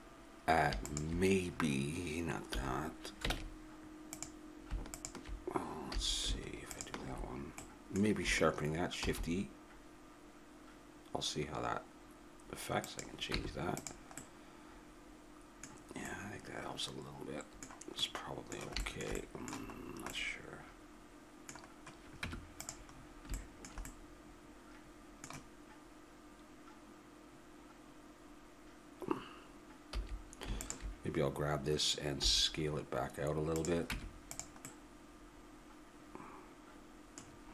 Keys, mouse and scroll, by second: 0.8-3.3 drag, 2.5 a, 3.3 ctrl+Tab, 4.9-5.9 drag, 5.9 a, 6.7 click, 7.7 middle click, 7.9 click, 9.0 shift+e, 13.4 Tab, 18.1-22.2 middle drag, 22.2 Tab, 23.0-25.3 middle drag, 25.7-30.0 middle drag, 29.9 a, 30.6-32.5 right drag, 32.2 s, 33.9 Tab, 34.7 click, 36.7 middle click.